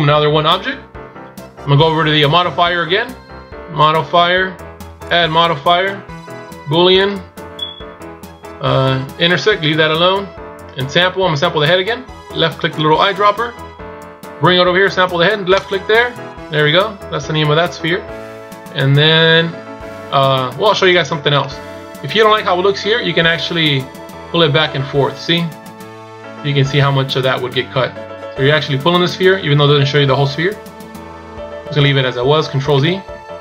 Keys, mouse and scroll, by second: 3.7 click, 4.9 click, 12.6 click, 21.3 middle click, 23.8 click.